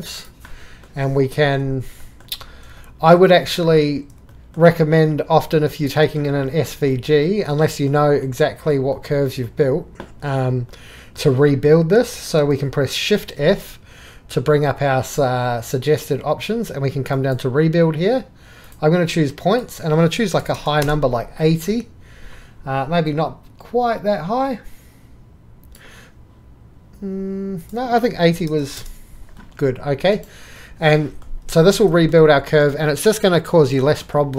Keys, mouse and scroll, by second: 0.8-1.3 middle drag, 2.7 middle click, 5.6 click, 6.7 click, 7.4 click, 18.7-19.5 drag, 20.8 Return, 23.1-25.5 drag, 28.7 KP_0, 28.8 Return, 30.2 click.